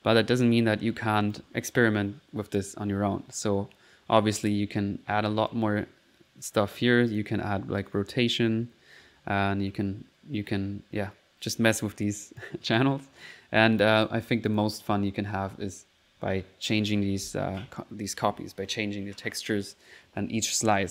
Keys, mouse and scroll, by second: 0.5 middle click, 1.3 click, 2.7 middle click, 6.4 middle click, 7.1 click, 12.4 click, 13.5 typing, 13.8 click, 14.5 click, 14.9 middle click.